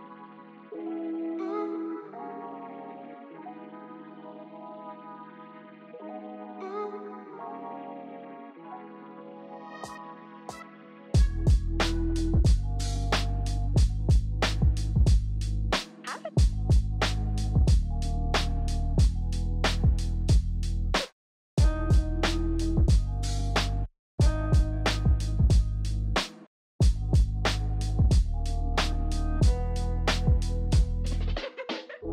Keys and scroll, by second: 0.8 Delete, 0.9 alt+Tab, 1.7 BackSpace, 2.3 alt+Tab, 4.6 ctrl+t, 5.0-6.2 typing, 6.8 ctrl+t, 8.1 ctrl+t, 8.4-10.0 typing, 9.3 alt+Tab, 10.3 alt+Tab, 11.4 ctrl+t, 12.7 d, 12.9 ctrl+j, 13.0 Escape, 13.1 Escape, 13.2 ctrl+j, 13.3 ctrl+t, 15.4-16.2 typing, 17.8-18.8 typing, 20.6 v, 21.1 ctrl+z, 21.3 ctrl+z, 22.2 Delete, 22.4 Delete, 25.5 shift+e, 26.6 ctrl+i, 26.7 b, 27.2 x, 30.3 shift+e.